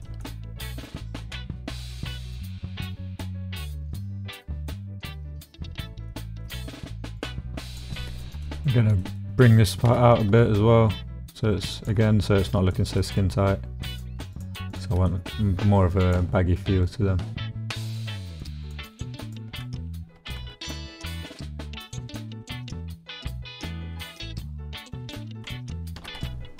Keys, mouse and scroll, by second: 0.0 shift+middle click, 0.9 shift+middle click, 1.2-2.7 middle drag, 2.9-5.8 middle drag, 6.1 shift+middle click, 7.2 middle click, 8.0 middle click, 8.3 shift+middle click, 9.0 middle click, 9.4 middle click, 9.9 g, 10.3 y, 11.7 click, 12.0 click, 13.0 click, 13.9 click, 14.3 shift+click, 15.1 click, 16.1 shift+click, 17.8 shift+click, 18.4 shift+click, 19.2 shift+click, 20.1 g, 20.3 z, 21.8 click, 22.1-23.3 drag, 23.9 click, 24.8 click, 25.2 click, 25.9 g, 26.1 y.